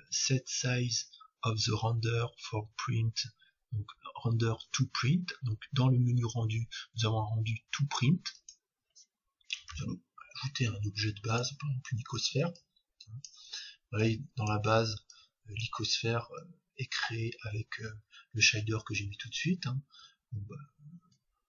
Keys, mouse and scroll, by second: 9.7 shift+a, 12.5-18.3 drag, 17.3-20.4 middle drag, 18.3-19.0 scroll down 1, 19.0-19.8 scroll down 1, 19.8-20.4 scroll down 1.